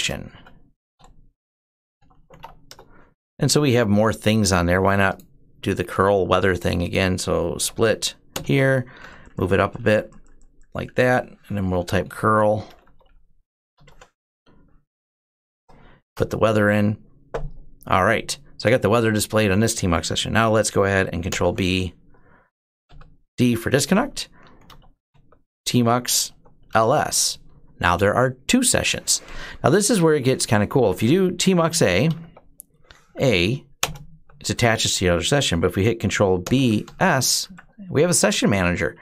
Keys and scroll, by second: 0.0-2.7 typing, 7.4 ctrl+b, 8.1 ", 8.7 ctrl+b, 8.8 ctrl+Up, 9.0 ctrl+Up, 9.1 ctrl+Up, 9.2 ctrl+Up, 9.3 ctrl+Up, 9.3 typing, 9.4 ctrl+Up, 9.6 ctrl+Up, 9.7 ctrl+Up, 9.8 ctrl+Up, 10.0 ctrl+Up, 10.1 ctrl+Up, 10.2 ctrl+Up, 10.7 ctrl+Up, 11.4-13.7 typing, 15.1 ctrl+shift+Insert, 15.9 Return, 15.9 typing, 21.1 ctrl+b, 22.7 d, 24.2-26.9 typing, 31.4-33.3 typing, 32.0 Tab, 33.6 Return, 36.2 ctrl+b, 36.6 s, 37.2 Up, 38.1 Down, 38.8 Up.